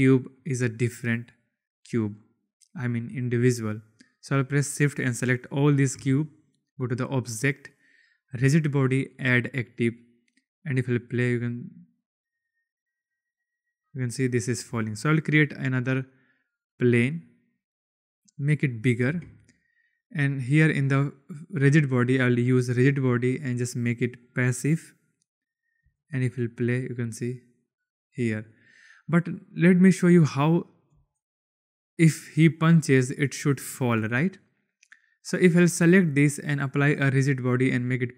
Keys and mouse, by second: 0.3 click, 0.7 click, 1.0 click, 2.4-3.4 drag, 4.8 shift+click, 7.7 click, 10.8 click, 11.6 click, 12.2 click, 12.9 click, 13.7 click, 14.3 click, 15.2 shift+a, 17.4 s, 20.2 click, 22.4 click, 23.4-24.3 drag, 25.7 space, 28.2 click, 30.8 space, 33.5-33.9 drag, 35.2 click, 36.5 click, 37.2-37.9 drag.